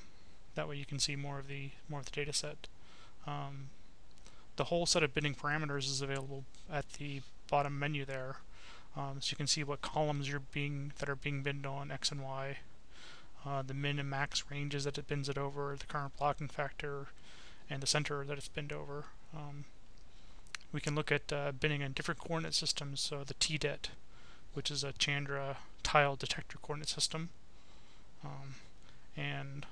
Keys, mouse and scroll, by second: 1.2 click, 3.4-6.3 drag, 7.7-8.9 drag, 9.7 click, 13.5 click, 18.2 click, 19.8 click, 20.8 click, 22.7 click, 25.8 click, 28.4-29.7 drag.